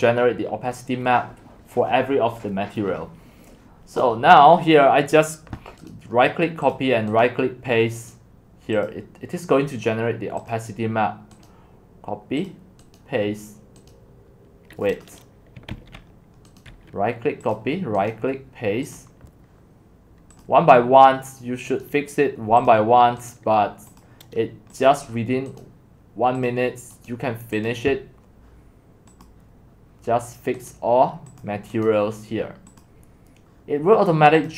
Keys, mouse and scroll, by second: 0.5 middle click, 0.8 middle click, 3.2 middle click, 3.3-4.9 scroll down 2, 4.9-5.5 scroll down 1, 5.5-5.9 scroll down 1, 5.9 right click, 6.7-8.1 drag, 8.1 right click, 8.9-11.5 drag, 11.5-12.5 right drag, 12.5 click, 13.0 right click, 13.9-15.7 drag, 15.7 ctrl+z, 16.6 right click, 17.6 click, 18.1 right click, 19.0-21.9 drag, 22.8 click, 24.0 right click, 24.0-25.6 drag, 25.6 right click, 26.6 click, 27.1 right click, 27.7-34.5 drag.